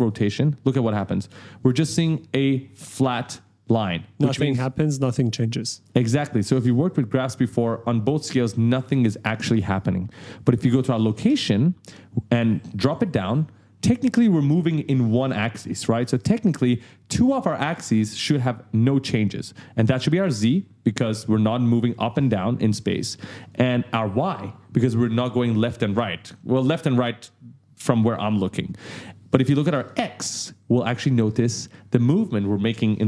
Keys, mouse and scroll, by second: 0.0 click, 3.5-3.8 ctrl+scroll down 1, 4.1-4.8 ctrl+scroll down 2, 5.2-6.0 ctrl+scroll up 2, 10.8 click, 12.8 click, 20.1 click, 22.2 right click, 23.4 click, 29.7 click.